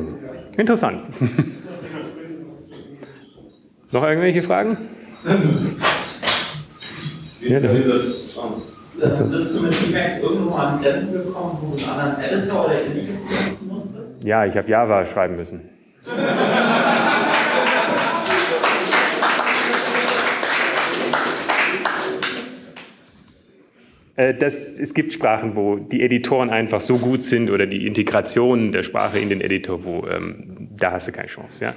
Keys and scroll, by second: 0.4-1.9 typing, 2.9 typing, 4.4 typing, 25.4 alt+shift+Down, 26.8 Up, 28.3 Up, 28.3 Return.